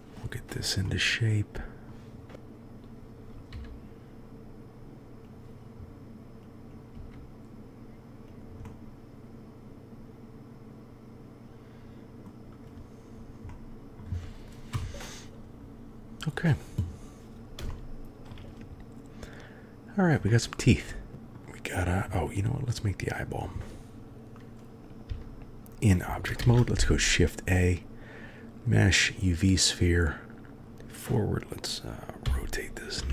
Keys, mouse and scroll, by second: 0.8-1.8 drag, 2.3 s, 3.5 g, 6.5 click, 6.9 g, 8.2-8.9 middle drag, 8.9-10.5 drag, 10.5-12.3 middle drag, 13.4-14.0 middle drag, 14.7 KP_1, 17.7-18.3 shift+drag, 20.3-21.3 drag, 22.2 click, 25.0 Tab, 26.3 shift+a, 30.6 KP_1, 32.2 r.